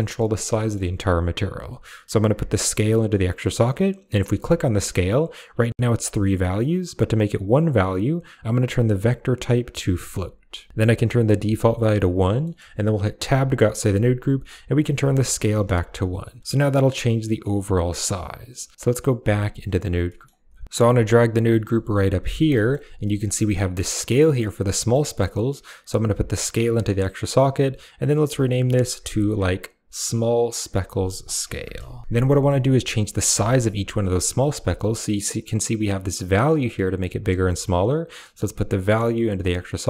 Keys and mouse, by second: 0.5 middle click, 1.5 click, 2.6 click, 4.3 click, 8.2-10.0 drag, 11.0 click, 12.2 middle click, 13.0 Tab, 14.6 click, 15.7-17.7 shift+drag, 18.5 click, 19.0 Tab, 19.9 middle click, 20.2 a, 21.3 middle click, 21.7 g, 22.1 click, 22.3 middle click, 22.9 middle click, 24.6 middle click, 25.5 click, 27.1 click, 27.2 click, 29.3 click, 29.5-32.0 drag, 32.1 middle click, 33.2 shift+middle click, 34.6-37.0 shift+drag, 37.3 middle click, 38.2-39.2 drag.